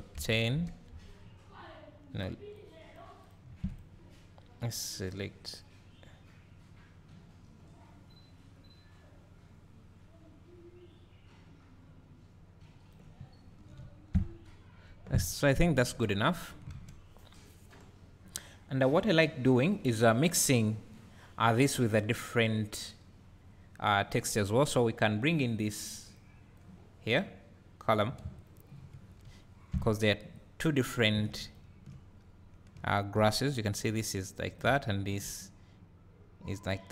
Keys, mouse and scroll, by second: 2.6 click, 3.7 click, 5.1-13.7 drag, 13.3-13.8 scroll up 2, 13.8 `, 14.6-15.7 scroll up 2, 15.7 KP_0, 16.6-27.5 drag, 16.7 alt+a, 17.6 scroll down 1, 28.4 ctrl+click, 30.3 click, 31.5 ctrl+shift+click, 32.3 scroll up 1, 32.7 `, 34.5 click, 34.9 ctrl+shift+click.